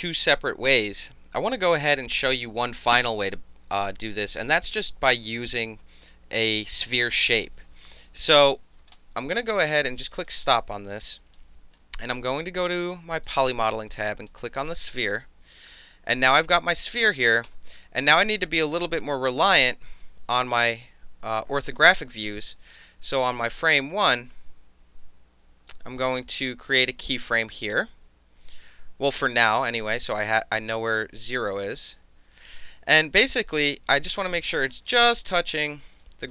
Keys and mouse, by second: 10.1 click, 11.0 click, 13.2 click, 14.3 click, 17.4 space, 19.4 space, 22.2-25.7 drag, 26.8 s, 34.9 alt+drag, 35.4 alt+drag, 36.0-36.3 alt+middle drag.